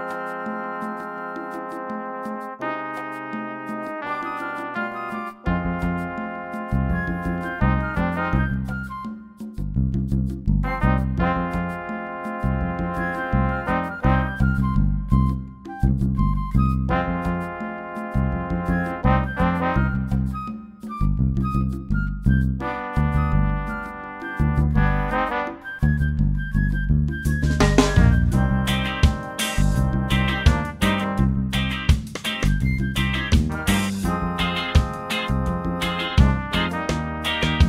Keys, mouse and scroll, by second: 0.8 click, 2.3 click, 2.9 shift+click, 4.3 click, 7.3 click, 10.2 click, 12.2 ctrl+d, 14.3 click, 17.1 ctrl+d, 19.5-21.5 drag, 22.0-23.6 drag, 26.7 click, 27.4 click, 28.0 shift+click, 29.4 click, 30.6 click, 31.9 click, 32.8 shift+click, 34.1 click, 35.4 click, 37.1 click.